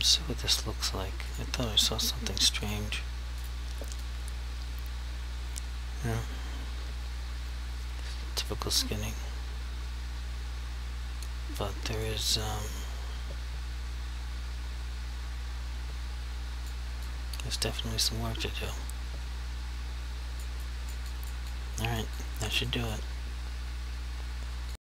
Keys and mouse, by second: 0.1 alt+click, 1.4 click, 3.5 alt+click, 4.2 click, 12.6 click, 17.2 click, 20.8 click, 21.3 click, 22.3 click, 22.8 click.